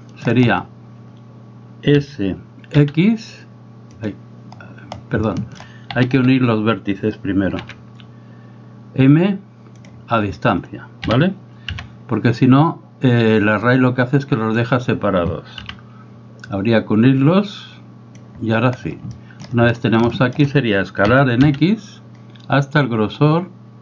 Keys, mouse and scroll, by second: 0.0 shift+middle click, 2.0 s, 5.3 shift+middle click, 6.0 a, 6.2 a, 7.6 m, 11.1 a, 11.8 b, 15.7 b, 19.1 shift+middle click, 20.1 shift+middle click, 21.1 s.